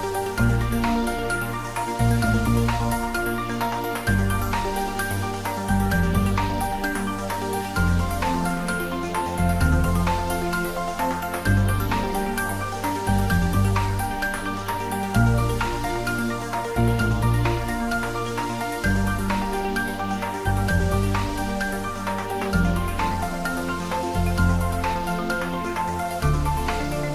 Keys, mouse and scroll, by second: 1.1 scroll down 1, 1.5-3.0 middle drag, 3.0-3.7 scroll up 1, 3.7-5.3 middle drag, 5.3 click, 6.0-7.0 typing, 8.5 click, 9.8 ctrl+z, 11.0 click, 11.6-12.7 scroll down 1, 12.7 click, 13.4 shift+z, 14.6-16.6 drag, 16.6-19.1 drag, 19.1 shift+d, 19.5 y, 22.2 y, 22.3 click, 24.0-25.6 typing, 26.2 click, 26.9 scroll down 1.